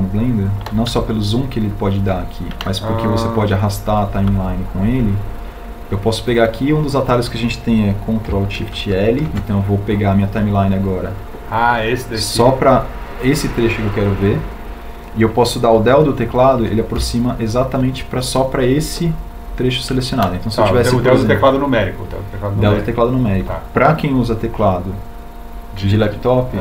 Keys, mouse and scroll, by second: 9.5 ctrl+alt+shift+l.